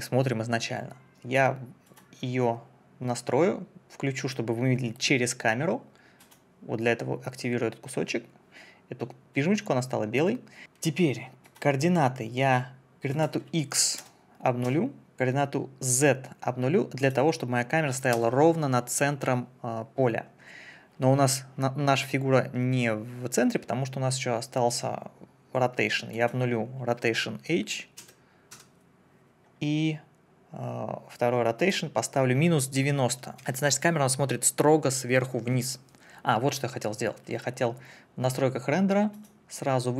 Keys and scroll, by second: 14.0 0, 14.6 Return, 17.9 0, 18.1 Return, 28.0 0, 28.5 Return, 33.1 KP_Subtract, 33.4 9, 33.4 Return.